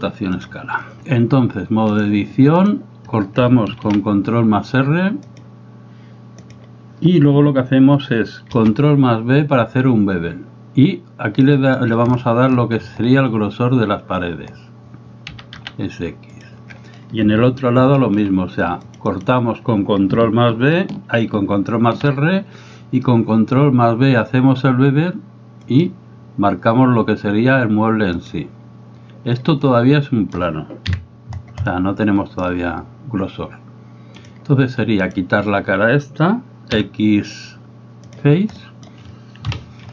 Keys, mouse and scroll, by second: 2.0-2.7 drag, 3.9 ctrl+r, 8.6 ctrl+b, 18.0 ctrl+r, 28.3 click, 29.8 middle click, 31.9 middle click, 34.2 click, 35.1 right click, 36.8 x, 38.7 middle click, 39.5 KP_7.